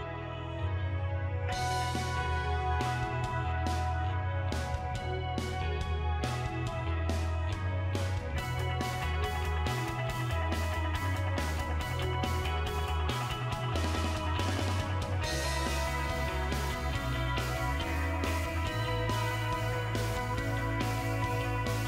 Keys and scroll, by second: 0.8 BackSpace, 1.2 6, 2.5 BackSpace, 3.0 7, 4.5 BackSpace, 4.9 8.